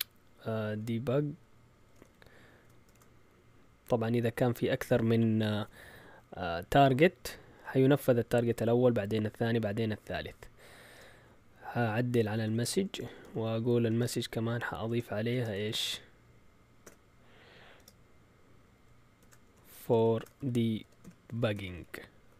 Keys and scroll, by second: 0.4-2.8 typing, 12.1-15.6 typing, 16.8-17.7 typing, 18.9-22.2 typing.